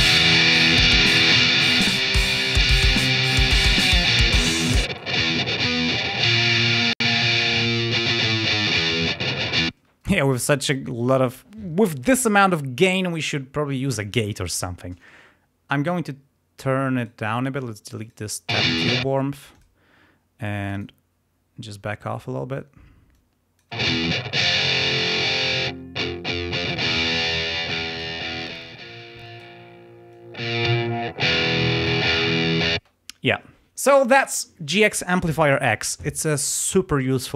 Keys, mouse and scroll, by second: 1.3 click, 3.0 click, 4.0 click, 4.9 click, 9.6 space, 16.9 right click, 17.9 click, 18.6 space, 19.3 click, 20.7 click, 23.1 click, 23.8 space, 24.5 click, 25.3-26.8 drag, 27.2-28.2 drag, 28.4-29.5 drag, 30.0 click, 31.8 click, 32.7 space.